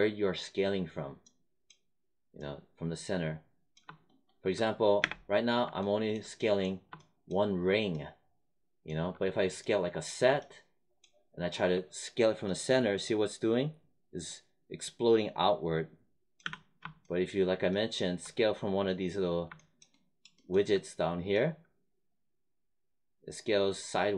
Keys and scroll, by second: 4.9 space, 16.4 z.